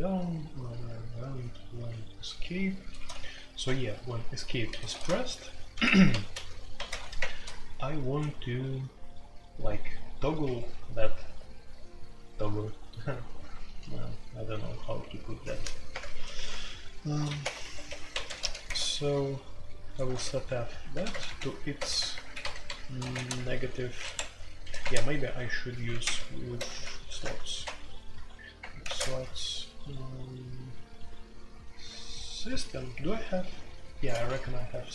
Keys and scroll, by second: 0.0-2.9 typing, 3.6 Escape, 4.4-7.7 typing, 10.4 Escape, 10.9-18.4 typing, 17.6 Escape, 18.6 Tab, 20.0-29.5 typing, 20.3 Escape, 21.9 Return, 22.3 Escape, 23.1 shift+Return, 34.1-34.9 typing.